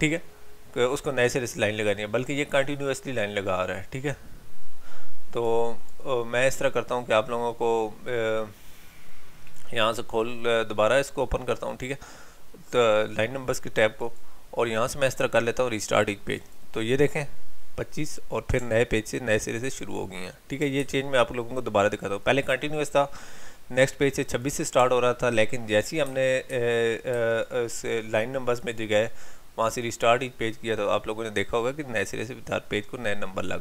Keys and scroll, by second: 20.8 ctrl+z, 26.0 ctrl+t, 26.5 ctrl+y.